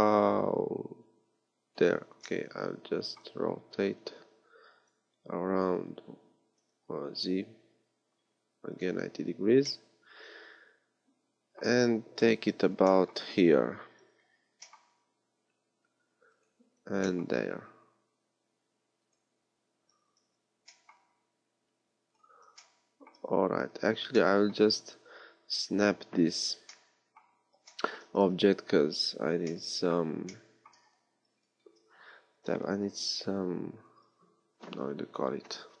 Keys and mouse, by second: 2.2-7.0 drag, 3.8 r, 9.7 click, 10.1-12.1 middle drag, 12.1 KP_1, 14.4 g, 16.9 g, 22.1 g, 25.7 KP_3, 28.1 z, 31.6 Tab, 32.3 a, 32.7 b.